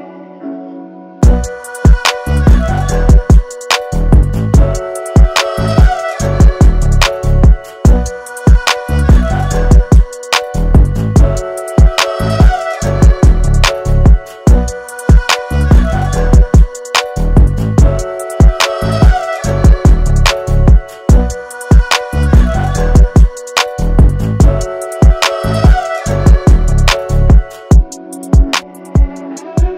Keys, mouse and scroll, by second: 1.8 Return, 4.0 scroll up 2, 4.5 space, 4.6 click, 5.3 alt+scroll down 1, 5.5 space, 5.6 click, 7.9 click, 9.2 ctrl+j, 13.9 click, 15.1 b, 15.9 alt+scroll down 1, 16.3 space, 16.5 click, 16.8 space, 17.4 right click, 18.4 click, 20.1 ctrl+z, 20.6 alt+scroll down 1, 21.0 space, 21.0-22.4 drag, 22.9 space, 22.9 click, 24.9 space, 25.0 click, 28.1 alt+scroll up 1, 28.3 space, 28.4 click.